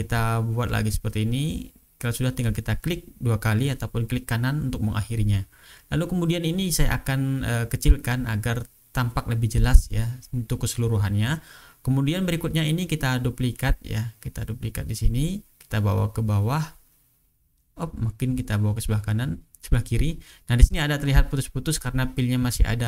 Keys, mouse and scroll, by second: 0.1 click, 2.5 click, 3.5 click, 5.2 click, 5.7 click, 6.0 click, 6.9 click, 8.1-9.0 ctrl+drag, 9.3-10.5 ctrl+drag, 10.7 click, 11.2 ctrl+scroll up 2, 11.8 ctrl+click, 12.7 click, 14.4 click, 15.9-19.3 drag, 20.6 shift+click, 22.3 click.